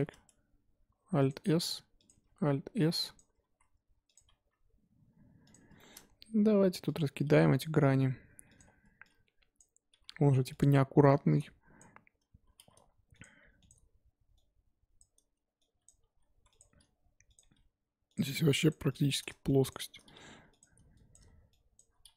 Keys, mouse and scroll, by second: 0.0 alt+s, 1.6 s, 2.1 alt+s, 3.4 alt+s, 4.3 r, 5.7-7.6 shift+middle drag, 7.6 click, 8.0 g, 9.6 click, 9.9 g, 11.8 click, 12.5 r, 13.2 g, 15.0 click, 15.8 click, 16.0 g, 16.6 r, 17.4 g, 18.7 click, 19.1 click, 19.7 shift+click, 20.1 g, 21.1 click, 21.7 shift+click.